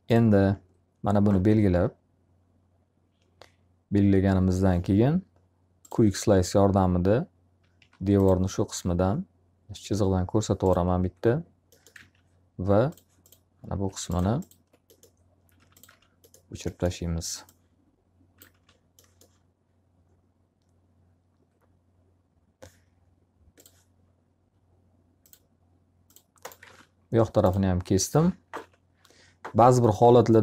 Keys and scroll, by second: 7.2 s, 11.5 alt+a, 15.5 alt+r, 26.1 alt+a, 28.5 ctrl+z.